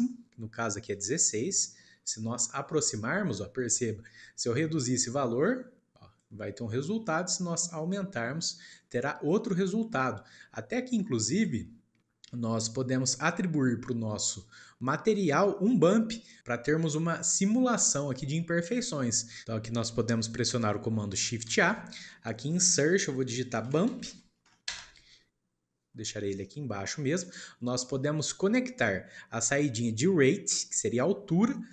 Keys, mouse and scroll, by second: 1.3-1.8 scroll up 4, 1.8-2.5 middle drag, 2.5-2.8 shift+scroll up 2, 3.6-4.6 shift+middle drag, 4.6-10.3 drag, 10.3-10.9 scroll down 2, 10.9-12.1 middle drag, 12.1-14.1 scroll up 1, 14.1-16.7 shift+middle drag, 16.7-17.3 scroll up 2, 17.3-18.9 shift+middle drag, 18.9-19.3 scroll up 2, 19.7 shift+middle click, 20.4 click, 21.4 shift+a, 30.9 click.